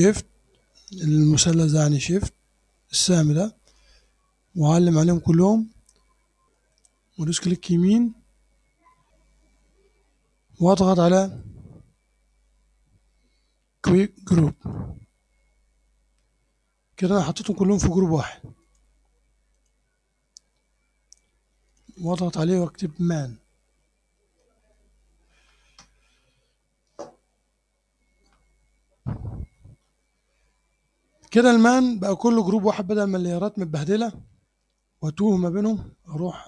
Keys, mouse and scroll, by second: 0.0-0.4 shift+scroll down 1, 3.7 shift+click, 6.6 right click, 14.6 click, 18.7 click, 19.6 click, 21.7 click, 24.0-25.2 typing, 25.7 Return.